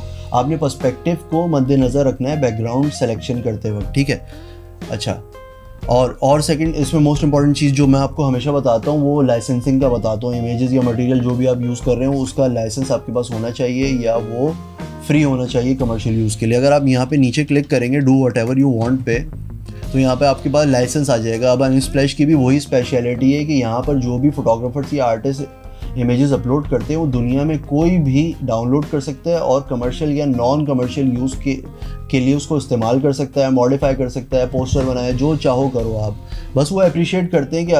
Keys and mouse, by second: 18.5 click, 20.4 click, 21.9 click.